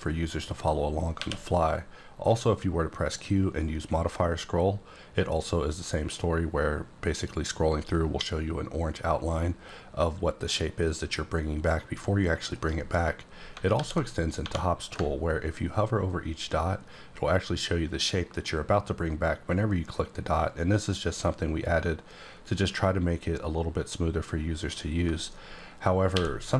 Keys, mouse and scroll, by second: 0.5 click, 1.1 q, 3.0 click, 3.6-4.6 scroll up 3, 4.6-5.5 scroll up 3, 5.5-6.2 scroll up 4, 6.8-8.8 scroll up 6, 8.8-9.9 scroll up 3, 9.9 scroll up 1, 11.0-12.5 scroll up 2, 12.5 right click, 13.7 alt+w, 14.4 1, 26.1 q.